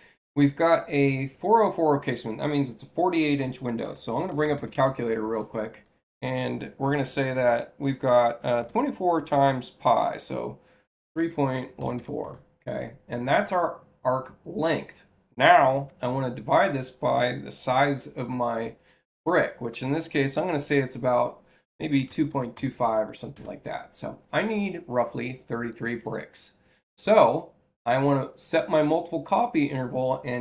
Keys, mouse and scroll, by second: 4.1 c, 4.5 c, 4.6 Return, 25.6 click, 27.9 alt+k.